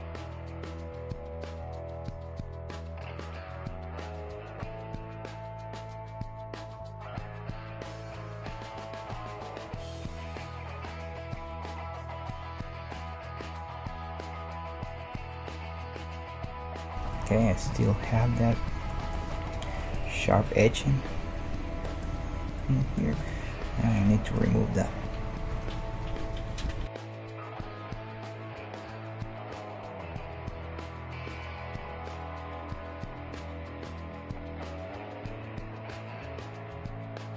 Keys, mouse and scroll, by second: 0.1 right click, 1.3 g, 2.7-4.2 right drag, 2.9 g, 3.7 g, 4.4-6.9 right drag, 5.0-10.1 middle drag, 6.1 g, 7.5 click, 10.9 Tab, 12.4 ctrl+2, 17.0 \, 25.5 Tab, 25.5 middle click, 26.9 \, 27.5 middle click, 28.1 right click, 29.4 Tab, 31.1 Tab, 32.2 ctrl+0, 33.3 middle click, 34.7-37.3 middle drag, 35.6-37.3 right drag.